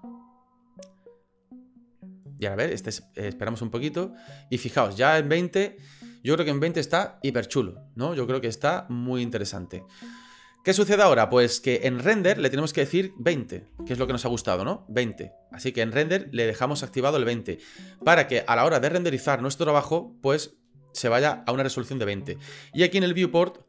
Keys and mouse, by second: 12.9-20.7 drag, 22.8-23.6 drag.